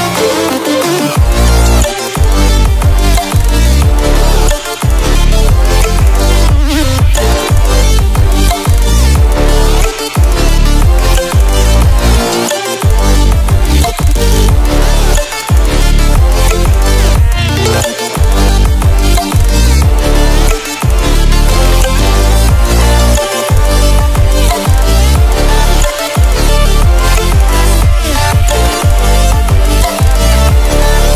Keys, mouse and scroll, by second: 1.6-3.7 alt+drag, 8.4 ctrl+alt+scroll up 1, 9.5-10.4 alt+shift+click, 10.5 ctrl+z, 11.2-12.4 drag, 12.7 ctrl+z, 13.7-14.9 alt+drag, 17.5 ctrl+alt+scroll down 1, 18.3-19.0 ctrl+alt+scroll up 1, 19.5 click, 20.0 ctrl+alt+scroll up 1, 20.8 click, 23.7 click, 29.7-31.1 drag.